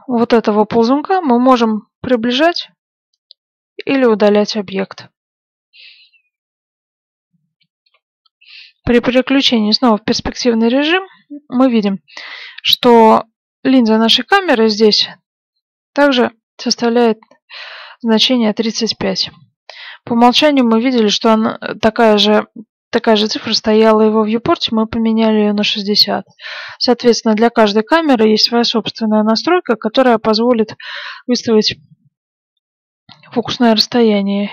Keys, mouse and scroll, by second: 9.4 click, 18.8-20.1 scroll up 1, 20.1-22.2 middle drag, 32.3-34.5 drag.